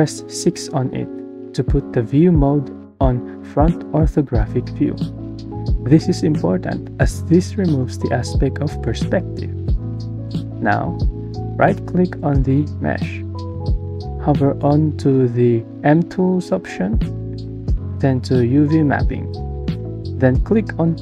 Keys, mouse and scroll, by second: 0.9-3.9 typing.